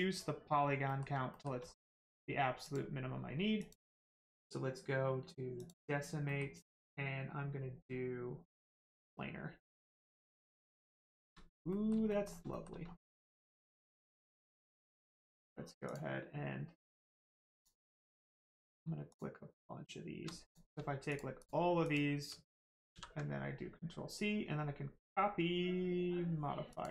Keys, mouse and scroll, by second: 0.8 middle click, 1.3 shift+middle click, 2.0 middle click, 2.6 click, 5.6 click, 6.2 middle click, 8.5 click, 9.1 middle click, 10.9 shift+middle click, 11.7 middle click, 11.7 middle click, 12.1 shift+middle click, 12.5 middle click, 12.5 middle click, 12.8 scroll down 1, 13.1 shift+middle click, 13.9 middle click, 13.9 middle click, 14.2 shift+middle click, 14.8 click, 17.5 click, 18.5 middle click, 19.1 shift+click, 20.4 click, 21.1 shift+click, 21.4 shift+click, 21.8 shift+click, 22.9 ctrl+c, 26.7 click.